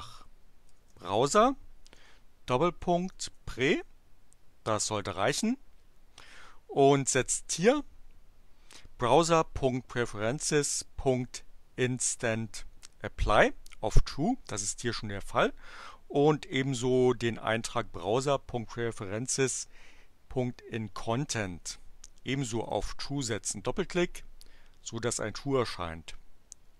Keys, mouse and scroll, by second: 0.0-3.8 typing, 22.5 click.